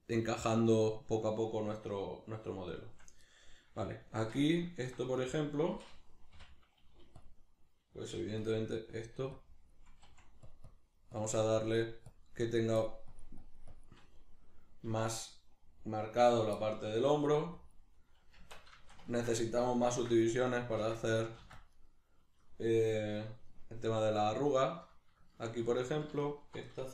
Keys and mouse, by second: 4.0 Tab, 6.3 k, 7.2-8.5 drag, 8.1 f, 10.1 click, 10.1 f, 14.9 click, 14.9 f, 18.4 Tab, 18.4 click, 18.8-20.6 ctrl+shift+middle drag, 19.9 ctrl+r, 20.6 right click, 20.8 ctrl+r, 21.2 right click, 21.4 ctrl+r, 21.9 right click, 25.2 shift+middle click, 25.8 alt+right click, 26.2 alt+shift+right click.